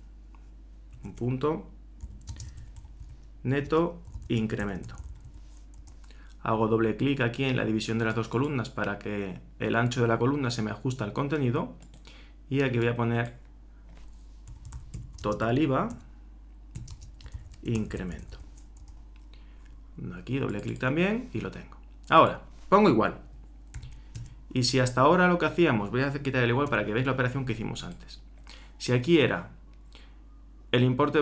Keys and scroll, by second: 0.9-5.7 typing, 5.8 shift+Return, 14.2-18.8 typing, 23.7 shift+0.